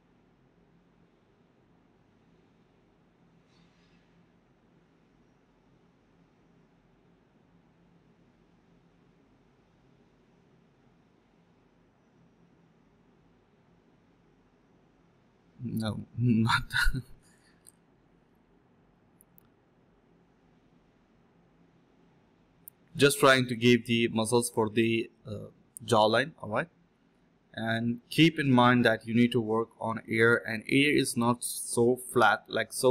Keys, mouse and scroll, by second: 0.0-0.3 typing, 5.6 typing, 5.6 alt+click, 6.2 scroll down 1, 6.4 middle click, 6.5-6.9 scroll up 1, 7.5-8.9 typing, 18.1-18.6 typing, 19.7 typing, 22.1 alt+click, 24.2-25.0 typing, 26.1 typing, 27.8 typing, 28.6 alt+click, 30.0 alt+click, 30.7 ctrl+z, 30.8 ctrl+z, 32.2 alt+click.